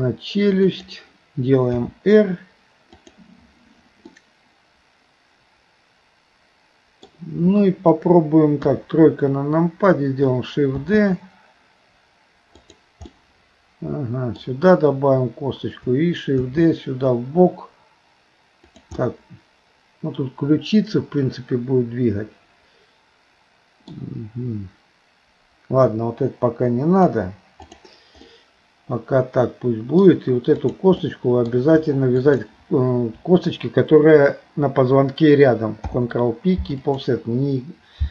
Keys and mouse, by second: 1.8 r, 4.2-7.1 middle drag, 8.6 KP_3, 10.8 shift+d, 13.2-14.4 middle drag, 16.5 shift+d, 19.0-24.0 middle drag, 27.1 Delete, 28.3-30.0 middle drag, 30.7 click, 32.3 shift+click, 35.9 ctrl+p.